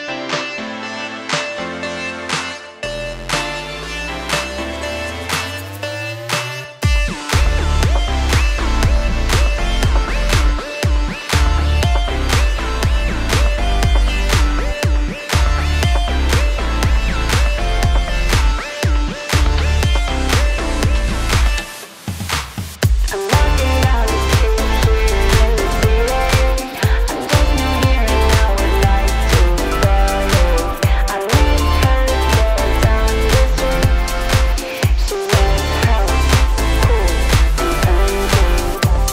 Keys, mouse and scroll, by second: 0.4 click, 1.1 click, 1.2-1.7 scroll, 1.6 alt+click, 1.7 alt+middle click, 2.3 click, 3.0 click, 4.1 click, 4.4 click, 5.2 click, 5.8 click, 6.7 click, 6.9 click, 7.3 typing, 7.9 Return, 8.9 alt+click, 10.1 click, 10.5 alt+click, 11.3 click, 11.9 click, 12.4 click, 13.7 click, 14.1 click, 14.9 click, 17.6 click, 18.6 click, 19.0 click, 20.0 click, 20.2 click, 21.6 click, 22.5 click, 22.7 click, 23.2-24.9 typing, 24.4 click, 24.8 click, 28.2 alt+click, 28.4 scroll, 29.0 middle click, 29.4 alt+click, 29.6 middle click, 29.7 middle click, 29.8 middle click, 30.1 middle click, 33.9 alt+click, 35.0 click, 37.7 click, 38.6 click.